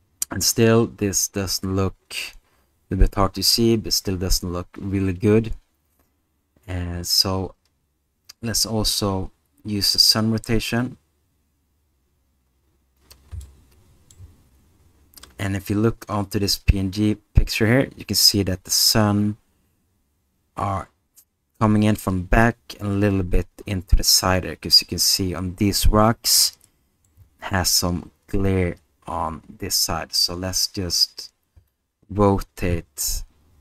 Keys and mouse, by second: 13.4-14.1 middle drag, 26.7 middle click, 31.7-33.6 drag.